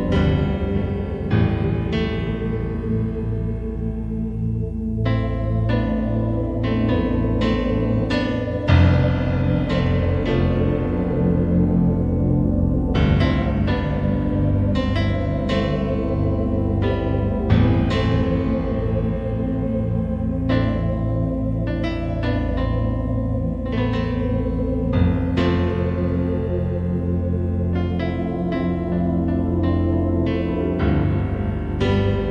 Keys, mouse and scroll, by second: 0.9 right click, 1.4 g, 2.0 click, 2.7-3.2 scroll down 4, 5.3 shift+d, 7.7 click, 8.5 shift+d, 10.1 click, 11.2 shift+d, 17.2 click, 27.7 middle click, 29.6 KP_5, 31.0-31.3 scroll up 3, 32.1 middle click.